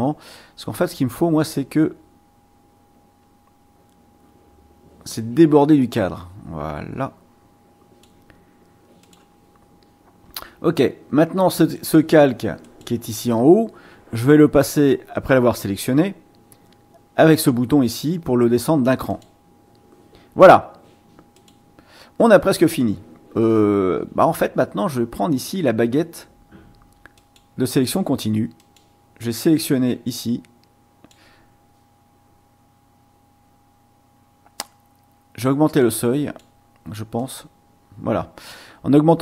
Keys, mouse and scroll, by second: 0.0 click, 1.5-8.2 drag, 9.0 click, 11.7 click, 12.6 click, 19.1 click, 21.3 click, 27.2 click, 28.6 click, 30.2-31.3 drag, 35.8 click, 37.2 click.